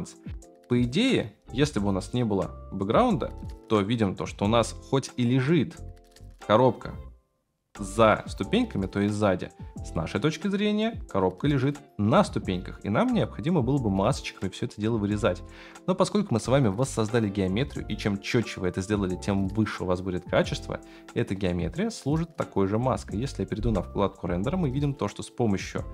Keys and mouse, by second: 6.3-9.2 middle drag, 9.8-13.1 middle drag, 15.0-15.4 shift+middle drag, 21.3-23.3 right drag.